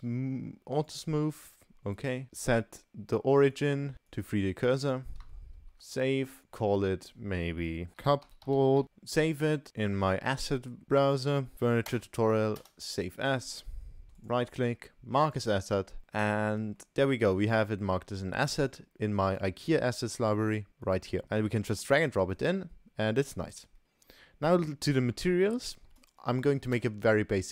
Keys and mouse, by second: 2.3-4.3 right drag, 4.9-5.3 middle drag, 5.5 ctrl+s, 6.4-9.7 drag, 8.8 ctrl+shift+s, 14.2-15.5 drag, 16.0 ctrl+s, 16.0-16.8 middle drag, 18.5-19.5 drag, 20.8 click, 21.2-22.1 drag, 22.3-23.3 middle drag, 23.7 Delete, 23.8-24.3 middle drag, 25.3-25.7 shift+middle drag, 26.0 click, 26.5 ctrl+s.